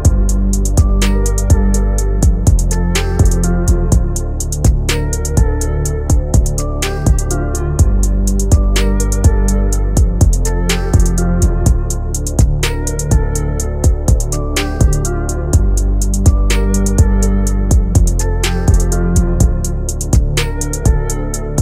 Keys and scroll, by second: 1.1 Right, 17.6 Delete.